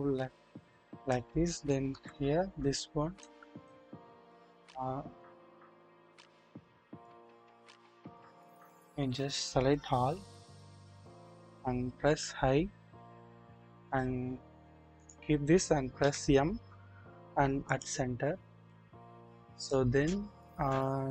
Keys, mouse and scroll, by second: 1.9 KP_1, 2.3-2.7 scroll up 1, 3.2 middle click, 3.5 click, 4.3 click, 6.6 click, 8.0-8.7 drag, 10.1 typing, 12.0 typing, 16.0 typing, 18.6-19.7 drag, 20.4-21.1 scroll down 1.